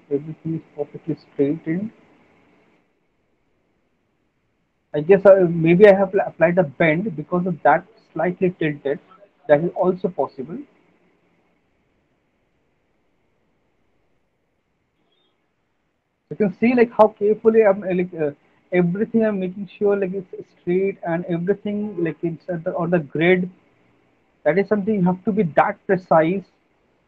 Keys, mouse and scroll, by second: 0.8 click, 2.1 click, 2.8 click, 4.3 click, 4.4 click, 5.3 click, 6.9 click, 8.2 middle click, 8.4 middle click, 9.2 click, 9.4 click, 11.2 click, 12.7 click, 15.8 middle click, 16.3 click, 16.6 click, 18.6 click, 20.1 click, 20.3 click, 21.9 click, 23.2 click, 24.8 click, 26.8 click.